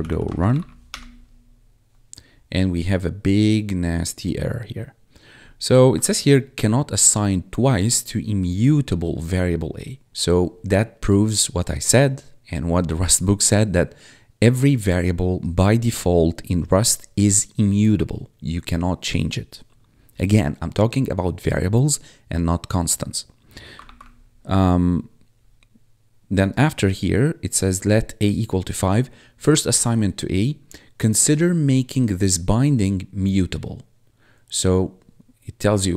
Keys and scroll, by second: 0.0-0.8 typing, 6.1 1, 23.7 ctrl+F1.